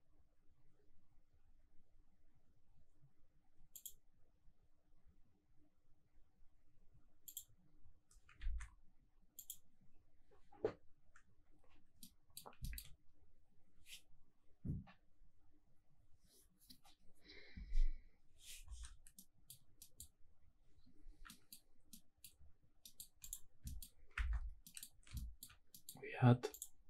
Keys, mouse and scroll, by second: 7.4 click, 8.4 ctrl+s, 10.0 click, 10.7 scroll up 1, 12.0 middle click, 19.1-19.5 middle drag, 19.9 middle click, 21.3 middle click, 21.9-22.2 middle drag, 22.8 middle click, 23.2 click, 23.6 shift+middle drag, 24.0 scroll up 2, 24.2 Tab, 24.6 middle click, 25.1 shift+middle click, 25.7 middle click, 26.0-26.5 scroll up 1, 26.5 click.